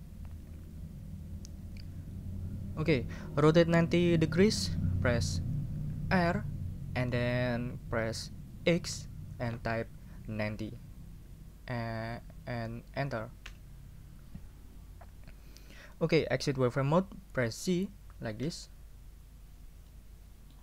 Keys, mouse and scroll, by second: 6.3 r, 8.9 x, 10.6 9, 13.4 Return, 18.4 z, 19.9 middle click.